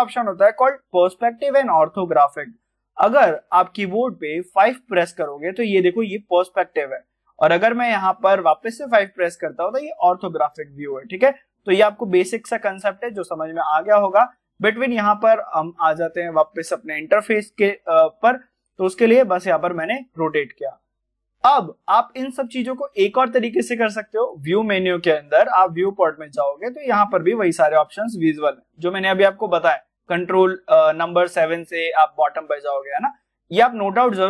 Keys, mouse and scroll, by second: 13.7 middle click, 14.5-14.9 scroll down 1, 14.9-20.0 middle drag, 20.0-21.9 scroll up 1, 24.1 click.